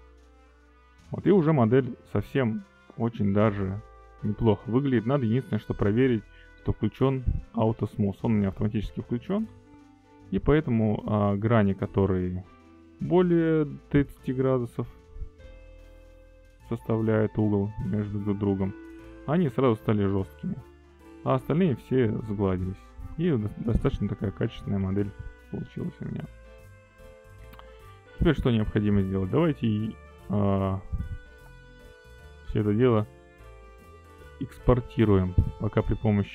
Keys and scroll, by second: 25.8 alt+a, 35.1 q.